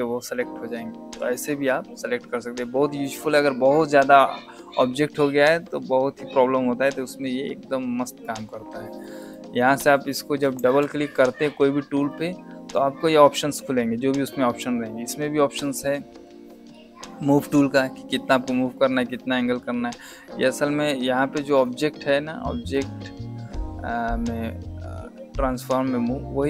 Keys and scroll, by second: 10.5 Escape.